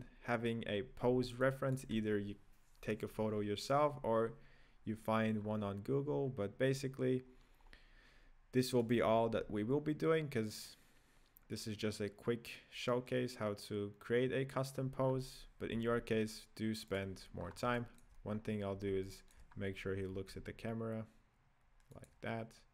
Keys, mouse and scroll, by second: 1.1 scroll down 3, 1.5-4.5 shift+middle drag, 5.5-7.2 scroll up 3, 7.2-9.1 scroll down 7, 9.1 right click, 9.3 g, 15.1-15.8 scroll up 5, 15.8 g, 17.4-17.8 scroll up 7, 17.8-18.4 shift+middle drag, 18.4 scroll up 2, 19.1-19.5 shift+middle drag, 19.5-20.2 scroll up 1, 20.2 g.